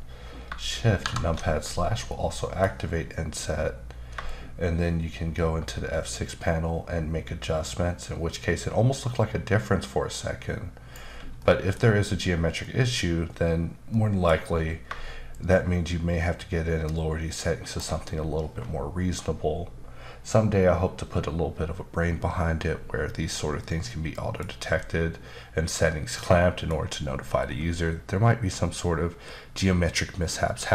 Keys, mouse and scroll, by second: 1.0 alt+shift+KP_Divide, 4.2 shift+click, 11.4 middle click, 11.8 scroll up 1, 12.6 middle click, 13.9 middle click, 15.3 shift+click, 23.6 middle click, 24.7 middle click.